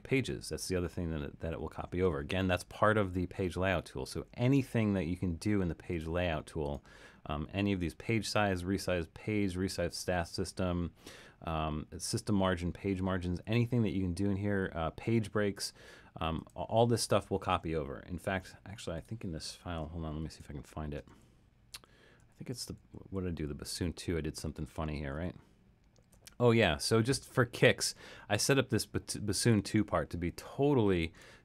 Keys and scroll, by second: 20.2 alt+super+,, 21.1 alt+super+,, 21.8 alt+super+,, 22.2 alt+super+,, 22.5 alt+super+,, 23.2 alt+super+,, 23.7 alt+super+,, 24.5 alt+super+,, 25.2 alt+super+,.